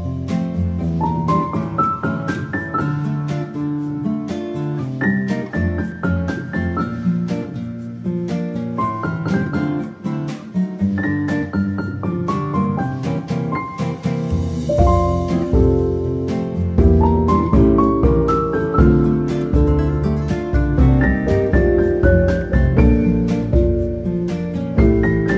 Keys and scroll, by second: 13.1 Tab, 16.1 Tab, 16.1 1, 16.2 Return, 16.3 Return, 16.8 ctrl+z, 22.5 ctrl+x, 22.8 ctrl+v.